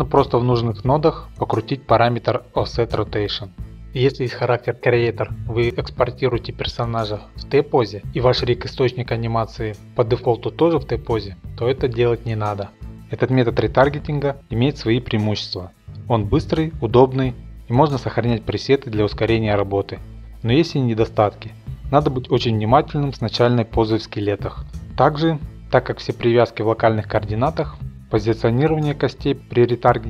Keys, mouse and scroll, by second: 0.3-0.7 shift+middle click, 1.2 middle click, 2.4 click, 4.2 click, 5.6 click, 8.5-9.6 middle drag, 9.6-10.6 drag, 10.6 middle click, 11.1 scroll, 11.7 middle click, 12.9 click, 12.9-13.6 scroll, 13.7-14.4 typing, 14.7-15.9 scroll, 15.2 middle click, 20.8 click, 21.5 click, 22.3 middle click, 28.6 click.